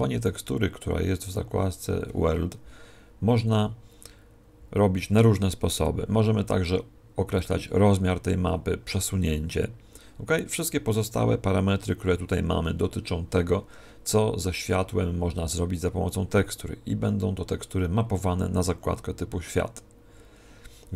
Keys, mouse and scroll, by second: 1.2-2.3 scroll up 4, 2.3-2.6 scroll down 2, 3.2 scroll down 8.